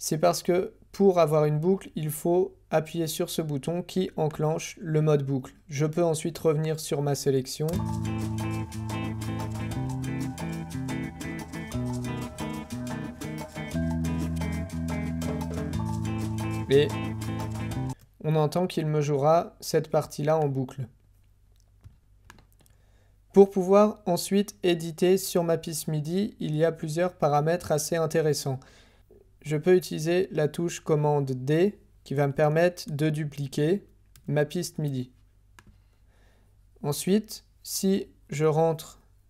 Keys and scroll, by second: 17.9 space, 32.9 super+d.